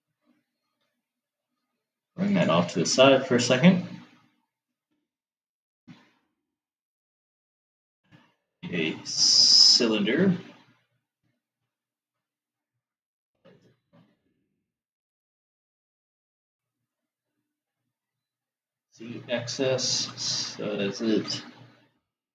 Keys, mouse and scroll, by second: 5.3 shift+a, 12.6 s, 20.5 s.